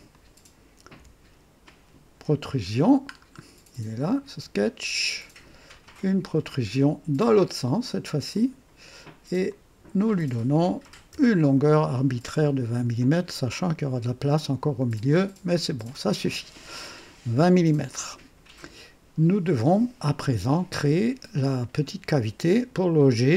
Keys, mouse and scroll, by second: 0.1 click, 1.0 &, 3.1-3.5 scroll down 1, 4.0 click, 5.7 click, 8.3 click, 9.5 click, 10.8 KP_2, 11.1 KP_0, 11.5 Return, 13.0-14.1 drag, 15.1-16.3 drag, 16.9-17.4 scroll up 3, 17.9-20.4 drag, 20.8-22.1 drag, 22.7 click.